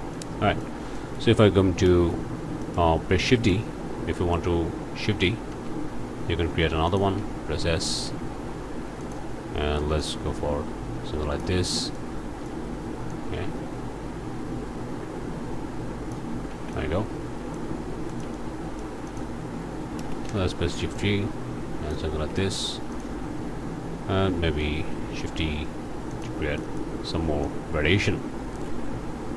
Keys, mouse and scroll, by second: 0.1 click, 0.9 click, 1.8 ctrl+space, 2.2-2.6 ctrl+scroll down 2, 2.6 click, 2.9-3.2 scroll up 2, 3.3 middle click, 4.1 middle click, 5.5 shift+d, 6.9 click, 7.2 s, 9.0 click, 10.0-11.6 drag, 11.7 scroll down 2, 12.0 click, 13.1-16.3 drag, 16.5 alt+a, 16.7 alt+click, 17.6 middle click, 17.9 shift+scroll up 1, 18.1 shift+click, 19.1 click, 20.0 shift+space, 20.3 shift+g, 20.9-22.1 drag, 22.2 alt+a, 22.4 alt+click, 22.9 alt+click, 24.6 shift+d, 26.1 click, 26.6 click, 26.6 middle click, 26.8 click, 27.4 click, 28.5 r.